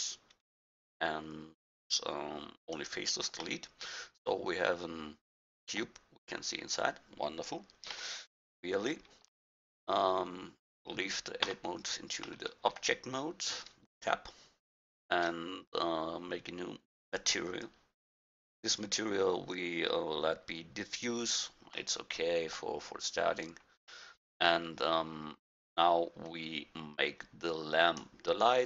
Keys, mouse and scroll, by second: 3.7-5.7 middle drag, 7.9 KP_1, 11.5 Tab, 12.5 middle drag, 12.7-13.5 middle drag, 22.0-23.7 middle drag, 24.1-25.5 middle drag, 25.5-27.5 right drag, 27.5-28.6 drag.